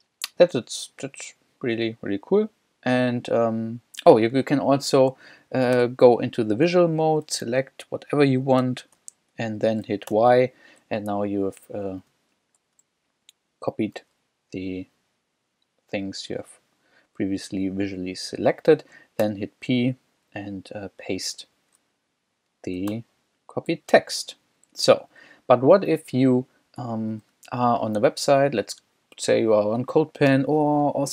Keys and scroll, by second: 4.2 w, 5.8 v, 7.3 l, 8.1 l, 8.6 e, 10.1 y, 12.1 k, 12.6 w, 19.3 shift+p, 22.9-25.6 typing, 26.0 super+Tab.